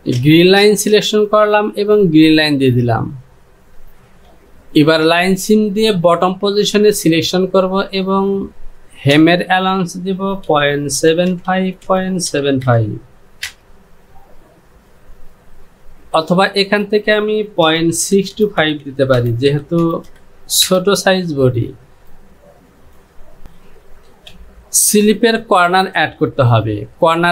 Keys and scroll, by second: 9.2 Down, 11.0 KP_7, 11.3 KP_5, 11.5 Down, 13.5 Return, 16.7 Down, 18.1 KP_6, 18.4 KP_2, 18.7 KP_5, 18.9 Down, 19.9 KP_Decimal, 20.1 KP_6, 20.7 KP_2, 23.4 Down, 24.1 Home.